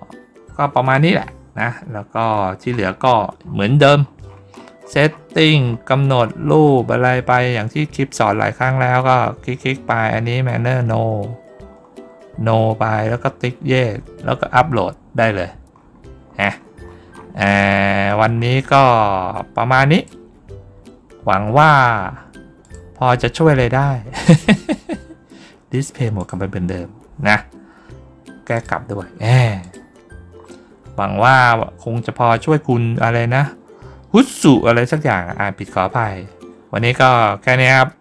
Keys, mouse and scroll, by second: 2.1-2.5 scroll down 2, 3.3 scroll down 1, 3.8-6.1 scroll down 3, 6.3-6.9 scroll down 2, 15.7-16.8 middle drag, 17.0-18.7 middle drag, 19.8 click, 22.5 click, 26.0 click, 28.4 click, 29.5 click, 30.2-31.7 middle drag.